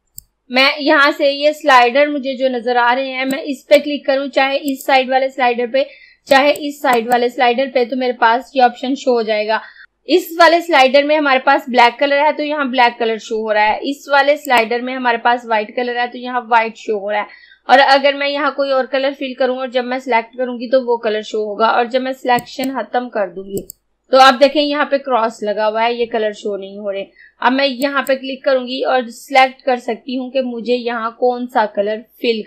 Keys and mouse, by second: 0.0-2.8 drag, 3.4-4.7 drag, 9.8 click, 14.5 click, 22.4 click, 27.8 click.